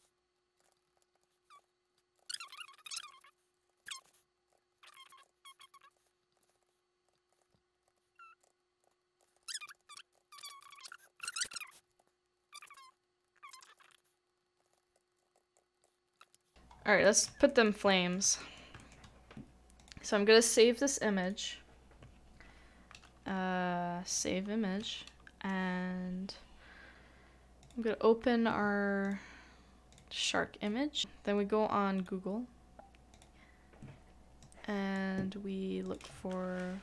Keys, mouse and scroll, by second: 0.7 shift+middle click, 0.7 shift+middle click, 1.0 shift+middle click, 1.0 scroll down 1, 1.2 shift+middle click, 1.5 ctrl+x, 2.2 ctrl+z, 2.4 ctrl+z, 3.0 shift+middle click, 3.1 shift+middle click, 3.7 shift+middle click, 4.0 ctrl+z, 4.5 ctrl+z, 4.5 ctrl+z, 5.3 ctrl+z, 6.0 shift+middle click, 6.1 shift+middle click, 6.4 shift+middle click, 6.5 shift+middle click, 7.1 middle click, 7.4 shift+middle click, 7.5 shift+middle click, 7.9 shift+middle click, 8.4 ctrl+z, 8.8 ctrl+z, 9.2 ctrl+z, 9.2 middle click, 9.4 shift+middle click, 10.1 ctrl+z, 10.4 ctrl+z, 10.8 ctrl+z, 11.0 ctrl+z, 11.4 middle click, 11.6 shift+middle click, 11.9 s, 12.5 shift+middle click, 12.9 middle click, 13.5 double click, 13.7 middle click, 13.8 shift+middle click, 14.5-16.3 typing, 14.6 shift+middle click, 14.7 shift+middle click, 14.7 shift+middle click, 16.1 middle click, 16.2 shift+middle click, 16.2 shift+middle click, 16.3 scroll down 2, 16.4 middle click, 17.0 shift+middle click, 17.5 shift+middle click, 17.9 shift+middle click, 18.4 shift+middle click, 18.8 shift+middle click, 31.9 shift+middle click.